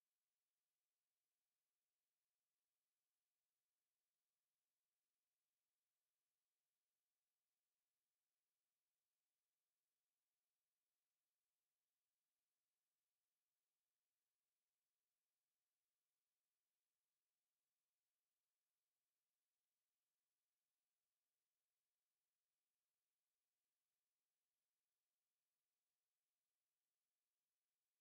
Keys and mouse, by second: 0.7 alt+click, 1.1 right click, 1.6 click, 2.2 alt+click, 14.5 right click, 15.5 click, 17.0 Delete, 18.2 alt+middle click, 18.7 alt+click, 19.6 click, 21.5 alt+middle click, 22.4 w, 23.6 alt+click, 24.1 alt+right click, 24.5 alt+click, 25.5 alt+middle click.